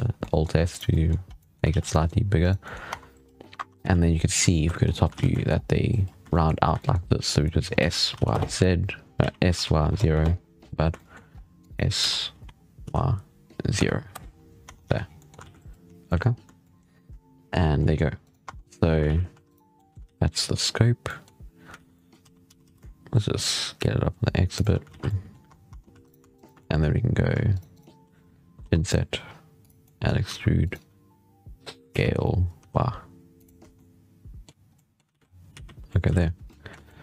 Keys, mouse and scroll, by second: 0.0-0.5 middle drag, 0.5 right click, 0.7-1.1 middle drag, 1.1 scroll up 1, 1.2-1.5 middle drag, 1.5 alt+a, 1.6 scroll down 6, 1.8-2.2 middle drag, 2.2 right click, 2.5 middle drag, 2.7 Tab, 3.4 1, 3.7 z, 4.6 shift+middle click, 5.0 alt+a, 5.1 middle click, 5.3-5.7 scroll up 3, 6.1 shift+middle click, 6.8 scroll up 2, 7.1 click, 7.6 s, 9.1 s, 10.5-10.8 scroll down 2, 10.8 shift+middle click, 11.2 scroll up 3, 11.5 click, 11.9 s, 14.5 Tab, 14.7 z, 14.9 scroll down 5, 15.1 middle drag, 15.3 alt+a, 15.9 shift+middle click, 16.1-16.5 scroll up 4, 16.5-17.3 shift+middle drag, 17.3 scroll down 4, 17.7-18.1 middle drag, 18.1 right click, 18.3 Tab, 18.4-18.9 scroll up 3, 18.9 alt+a, 19.2 3, 19.3 right click, 19.6 middle click, 19.9 alt+a, 20.2 right click, 20.9-21.6 middle drag, 21.6 alt+a, 21.8 middle click, 22.3 s, 24.8 alt+a, 24.9-27.4 middle drag, 27.4 shift+right click, 27.6 shift+right click, 28.5 i, 29.7 middle click, 30.1 e, 31.8 s, 33.4 Tab, 33.6-34.5 middle drag, 34.5 scroll up 1, 34.6-35.0 middle drag, 35.0 alt+a, 35.0-35.4 scroll down 5, 35.4 z, 35.7 middle click, 35.9 z, 36.3-36.9 middle drag, 36.9 scroll down 1.